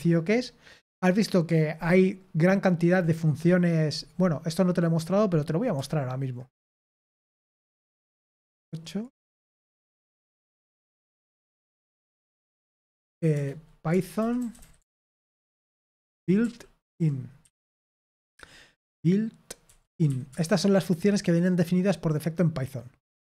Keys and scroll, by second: 5.7-6.3 scroll up 1, 6.3-8.6 scroll up 1, 8.6 super+8, 9.8-10.9 typing, 10.9 Return, 12.8 typing, 13.9-18.1 typing, 19.6-20.5 typing.